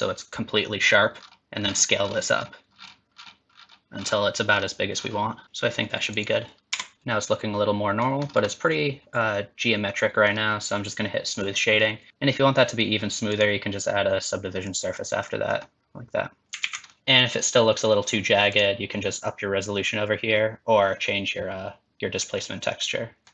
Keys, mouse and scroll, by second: 6.7 Tab, 6.9 middle click, 6.9 click, 8.2 scroll up 3, 8.5 middle click, 11.3 click, 11.9 middle click, 12.1 ctrl+z, 13.3 click, 15.3 middle click, 16.6 alt+z, 16.9 middle click, 17.0 middle click, 17.0 scroll up 3, 18.5 click, 23.2 shift+middle click, 23.2 scroll down 1.